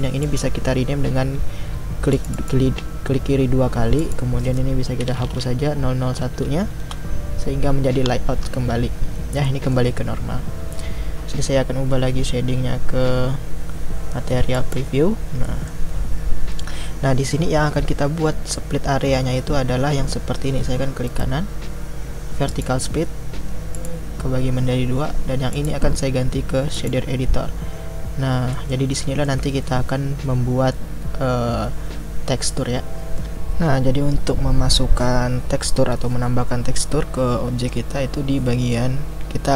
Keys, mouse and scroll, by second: 9.4-14.5 middle drag, 14.5 click, 15.5 middle click, 15.9-19.4 scroll up 1, 22.6-23.8 right drag, 26.8-32.1 drag, 32.1-35.4 scroll up 3.